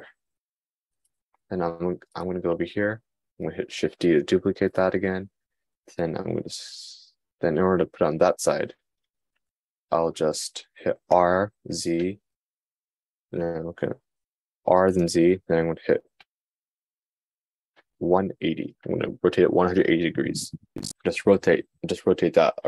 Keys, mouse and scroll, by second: 4.6 shift+d.